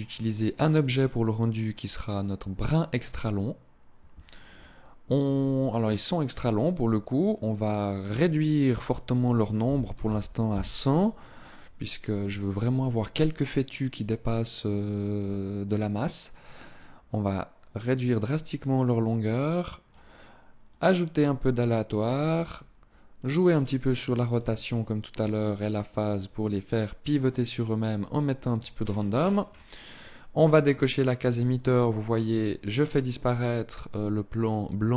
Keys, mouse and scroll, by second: 5.1 click, 7.8 click, 14.9-15.3 scroll down 2, 15.8 click, 20.4 click, 22.0-22.4 scroll down 3, 22.9 click, 24.0 click, 24.2 click, 28.4-29.6 scroll down 10, 30.4 click.